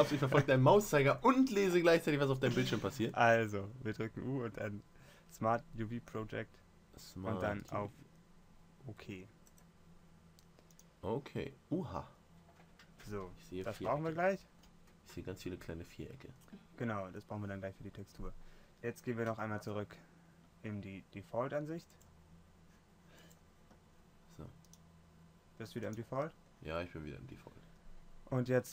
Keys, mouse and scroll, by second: 19.5 Tab, 23.7-27.5 drag.